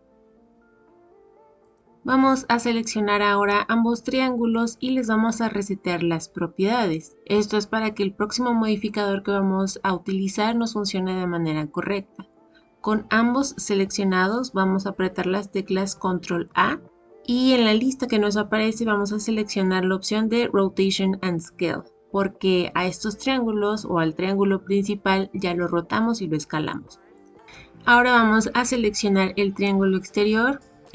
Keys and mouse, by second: 3.4-5.3 drag, 16.4 ctrl+a, 29.5 click.